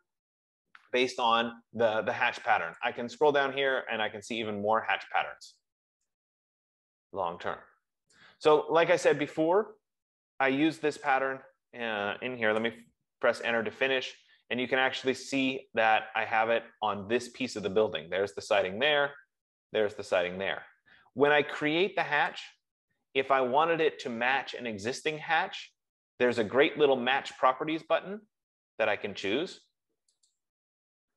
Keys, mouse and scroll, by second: 8.4 click, 11.5 click, 12.8 Return, 14.3-15.1 scroll, 15.1 scroll, 17.3 scroll, 19.2 scroll, 21.0-21.4 scroll, 22.7 click, 30.7 click.